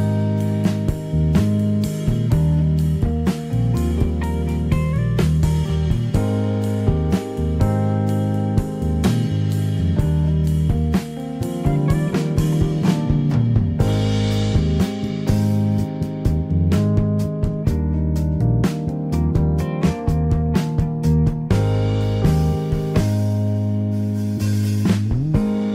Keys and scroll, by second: 0.0 ctrl+z, 0.5 Escape, 12.3 Escape, 20.7 Escape, 25.3 Escape.